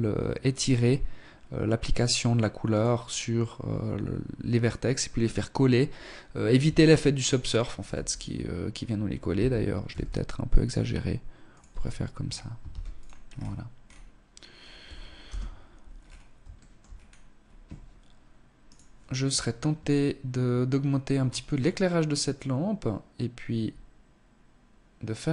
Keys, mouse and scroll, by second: 5.5 Tab, 6.1-6.8 scroll down 1, 6.8 Tab, 6.8 scroll down 1, 7.6-8.2 scroll up 2, 8.2 s, 10.6 Tab, 11.1-11.5 scroll down 2, 11.6 ctrl+s, 12.2-12.7 scroll down 1, 12.7-13.6 scroll down 4, 13.6 scroll down 1, 14.2 KP_0, 14.8-15.2 scroll down 2, 15.4 shift+middle click, 15.8-16.4 scroll down 3, 17.6 right click, 20.2-20.5 scroll up 1, 20.5-20.9 scroll down 2, 21.2 click, 25.2 right click.